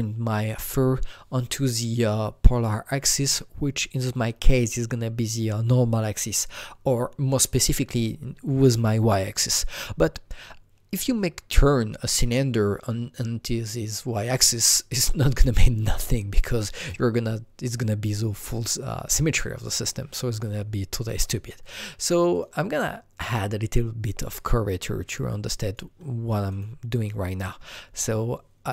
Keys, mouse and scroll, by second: 21.6 click, 22.3 click, 24.4-28.7 drag.